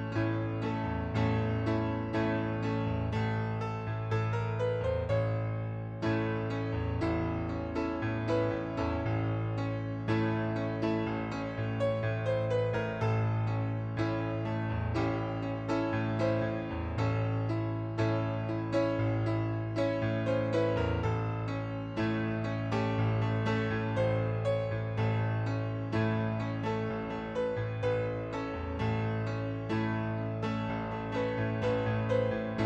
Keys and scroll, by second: 12.2 typing, 14.7-15.1 typing.